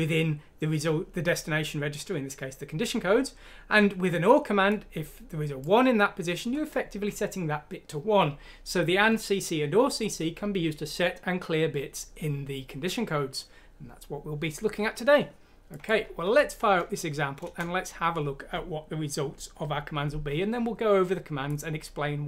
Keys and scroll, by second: 16.2 F6, 17.4 Return.